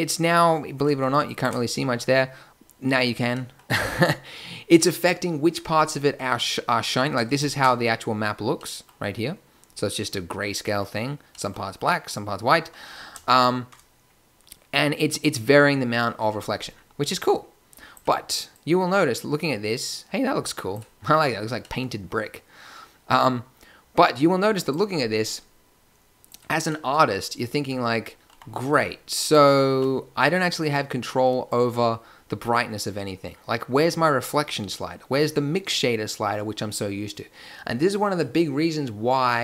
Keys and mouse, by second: 8.6 middle drag, 8.7 drag, 8.9-10.7 middle drag, 20.3-21.5 middle drag, 21.6 middle click, 24.9 middle click, 28.2 g, 29.6 a.